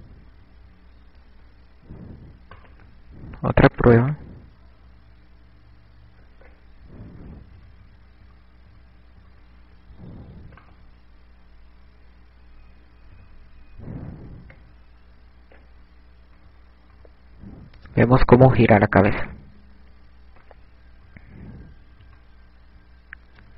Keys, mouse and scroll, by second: 0.2 KP_6, 0.8-2.3 KP_6, 3.5 right click, 3.5 click, 7.7 ctrl+z, 8.2 KP_4, 8.4 KP_4, 9.9 KP_4, 11.6 right click, 13.7 KP_7, 15.7 click, 17.4 KP_1, 17.9 KP_3, 18.8 KP_6, 19.5 ctrl+z, 21.5 KP_1, 23.1 KP_3.